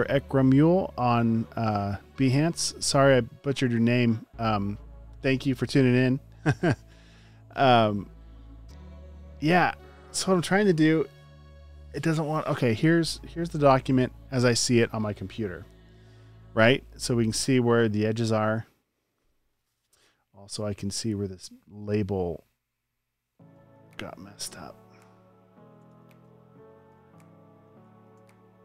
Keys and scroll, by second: 23.5 space, 24.1 super+space, 26.0 b, 26.8 space, 27.3 super+space, 28.0 space.